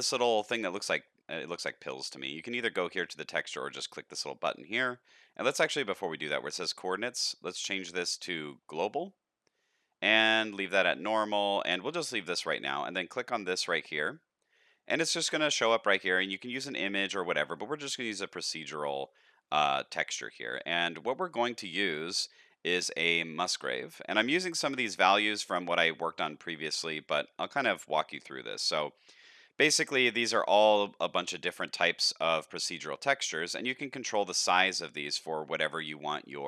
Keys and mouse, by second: 6.8-8.8 drag, 17.5-23.7 drag, 30.1-33.7 drag, 35.1 middle click, 36.2 middle click.